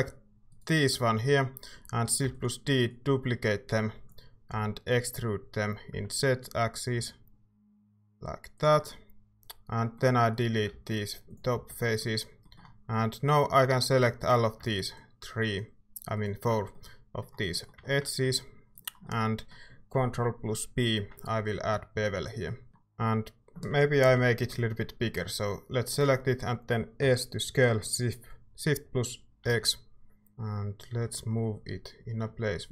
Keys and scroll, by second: 2.2 d, 4.5 e, 5.9 z, 6.9 z, 11.2 x, 11.5 z, 21.0 ctrl+b, 22.7 Tab, 24.0 ctrl+KP_Add, 27.0 s, 29.4 x.